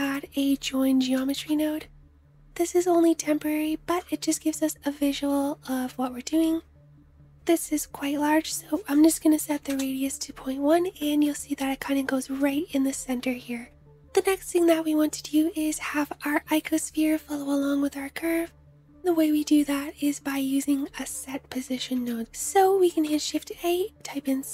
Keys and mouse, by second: 2.5-7.4 middle drag, 7.4 click, 8.2-22.2 middle drag, 22.2 shift+a, 23.2-24.5 drag.